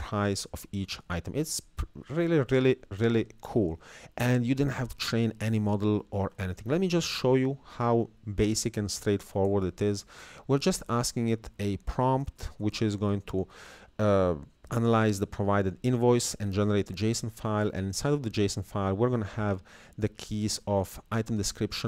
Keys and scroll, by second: 5.3 alt+Tab, 8.7 Up, 11.0 Down, 11.9 Left, 13.9 Right, 15.2 Right, 19.3 Down, 19.7 Left.